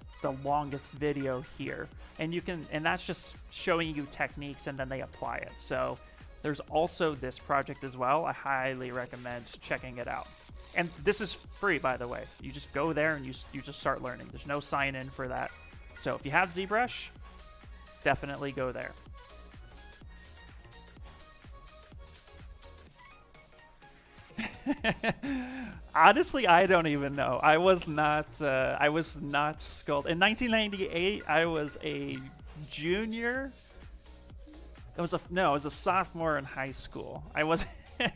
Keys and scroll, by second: 9.2 ctrl+c, 26.9 s.